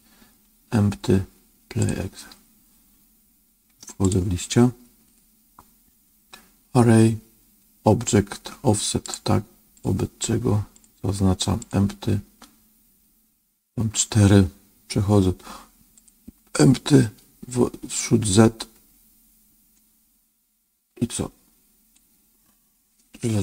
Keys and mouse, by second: 4.0-9.1 drag, 9.7 click, 10.8 click, 15.9 click, 18.0-21.9 drag.